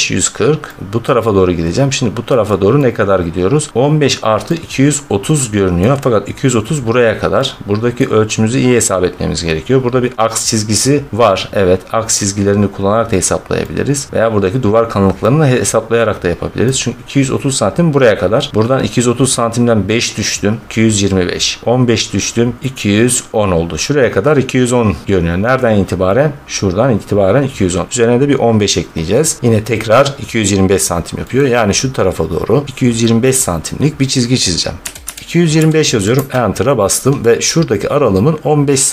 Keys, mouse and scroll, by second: 0.9 middle click, 1.5 middle click, 1.5 middle click, 1.6 middle click, 2.2 middle click, 2.4 scroll, 3.6 scroll, 5.6 scroll, 7.9 middle click, 14.1-15.6 middle drag, 16.1 middle click, 17.1-17.5 scroll, 18.2 scroll, 25.5-29.8 middle drag, 31.2-35.4 middle drag, 34.8-35.4 typing, 36.0 Return, 36.7-37.5 typing, 38.0-38.6 scroll.